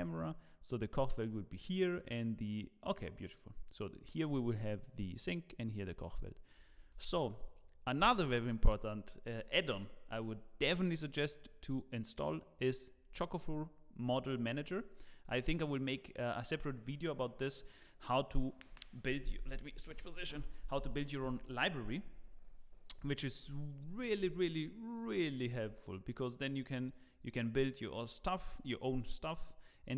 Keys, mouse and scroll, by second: 7.0 ctrl+s, 12.1 click, 25.3 shift+right click, 26.8 click, 28.5 click.